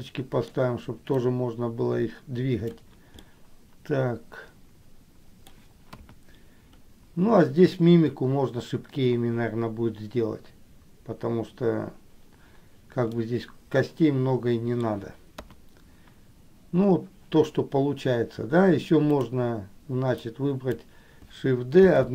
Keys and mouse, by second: 1.3-2.9 drag, 3.4-5.7 middle drag, 6.1 KP_1, 13.3-15.1 middle drag, 15.6 KP_1, 20.5 click, 22.0 shift+d.